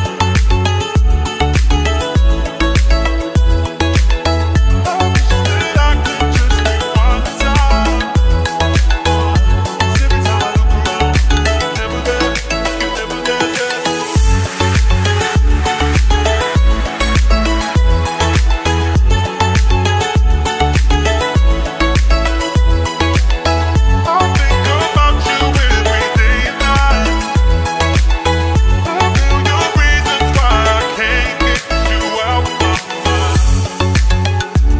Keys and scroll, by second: 10.3 Delete, 11.8 F3, 12.2 Escape.